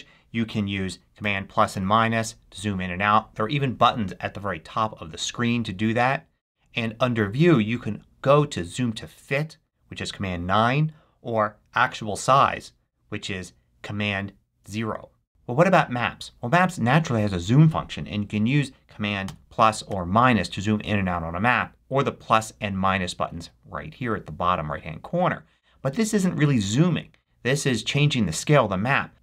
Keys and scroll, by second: 1.1 super+-, 1.6 super+=, 2.1 super+-, 19.1 super+=, 19.8 super+-.